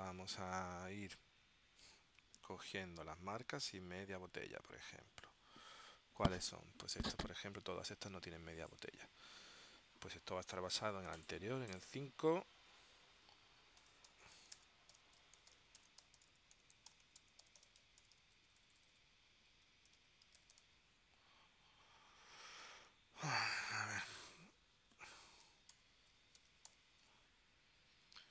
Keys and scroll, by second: 13.7-18.7 typing, 19.8-21.2 typing, 25.8 ctrl+alt+super+p, 26.5 space.